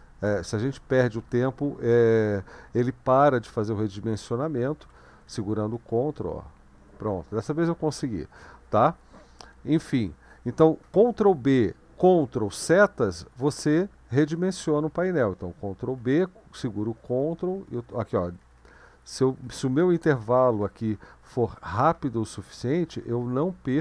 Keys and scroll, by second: 4.8 ctrl+b, 5.6 ctrl+Right, 16.0 ctrl+b, 16.7 ctrl+Left, 17.0 ctrl+Left, 17.2 ctrl+Left, 17.4 ctrl+Left, 17.6 ctrl+Left, 17.9 ctrl+Left, 18.1 ctrl+Left, 18.5 ctrl+Left, 18.6 ctrl+Left, 18.8 ctrl+Left, 19.3 ctrl+Left, 19.5 ctrl+Left, 19.8 ctrl+Right, 20.0 ctrl+Right, 20.2 ctrl+Right, 20.3 ctrl+Right, 20.5 ctrl+Right, 20.8 ctrl+Right, 21.0 ctrl+Right, 21.1 ctrl+Right, 21.3 ctrl+Right, 21.5 ctrl+Right, 21.7 ctrl+Right, 22.0 ctrl+Right, 22.2 ctrl+Right, 22.6 ctrl+Right, 22.8 ctrl+Right, 23.1 ctrl+Left, 23.2 ctrl+Left, 23.4 ctrl+Left, 23.5 ctrl+Left, 23.7 ctrl+Left.